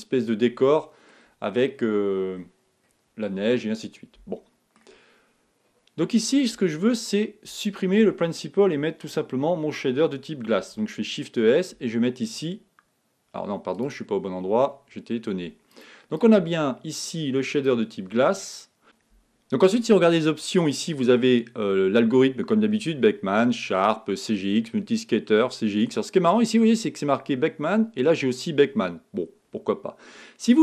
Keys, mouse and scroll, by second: 1.4-1.9 scroll down 3, 1.9-3.5 scroll up 5, 3.5-6.6 middle drag, 6.6 click, 15.8 click, 18.8 click.